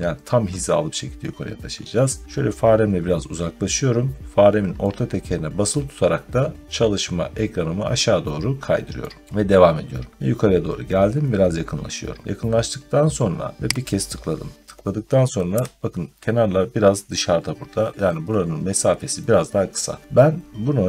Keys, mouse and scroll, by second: 2.2 middle click, 2.8 middle click, 6.8-7.9 scroll down 1, 8.9 middle click, 10.9 scroll up 1, 11.4-12.1 scroll up 1, 12.2 scroll up 1, 13.7 click, 15.4 Escape.